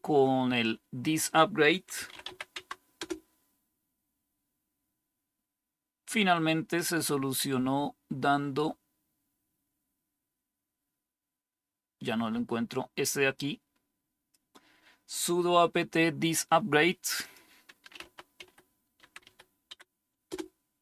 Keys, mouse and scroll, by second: 1.6-2.7 typing, 2.9 Return, 13.2-14.3 drag, 17.6-19.6 typing, 17.9 click, 20.2 Return.